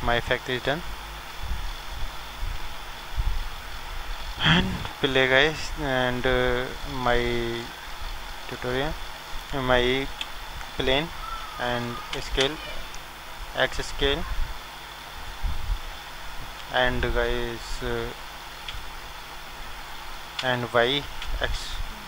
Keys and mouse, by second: 2.2-4.6 drag, 4.6 middle click, 4.9 shift+a, 10.1 KP_7, 12.1 s, 16.0-17.9 drag.